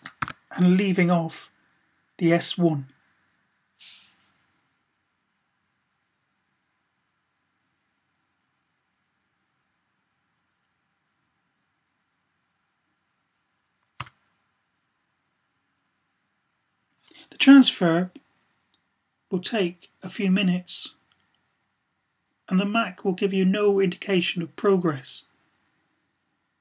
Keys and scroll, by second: 0.1 1.